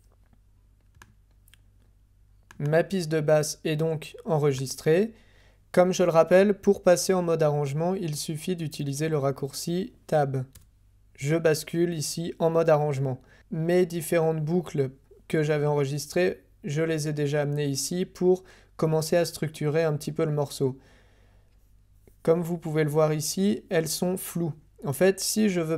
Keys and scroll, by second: 10.5 Tab.